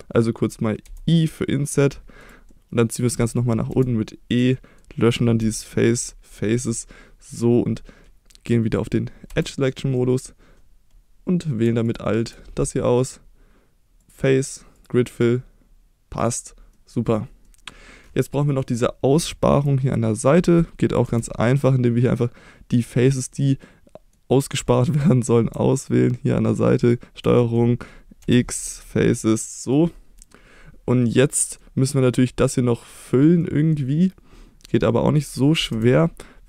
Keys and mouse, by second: 0.9 i, 2.2 click, 3.7 e, 4.3 click, 4.5 middle click, 5.4 x, 9.3 2, 10.0 middle click, 11.9 alt+click, 14.1 click, 16.7 middle click, 17.5 middle click, 18.4 middle click, 19.3 shift+middle click, 21.1 3, 22.7 click, 23.3 middle click, 24.6-24.9 middle drag, 27.4 middle click, 28.2 x, 29.2 middle click, 30.3-31.6 middle drag, 32.2 middle click, 33.4 middle click, 35.7 2.